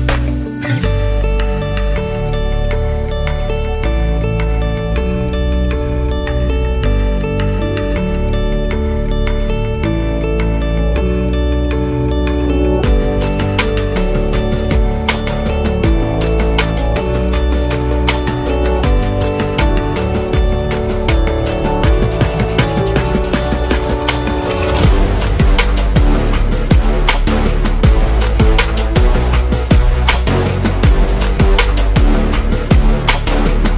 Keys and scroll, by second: 21.8-22.6 typing.